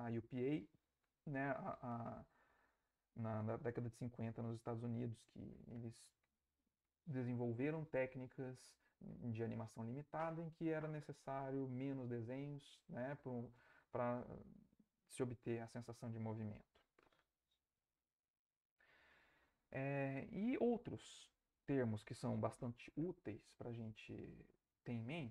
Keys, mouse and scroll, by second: 17.9 Right.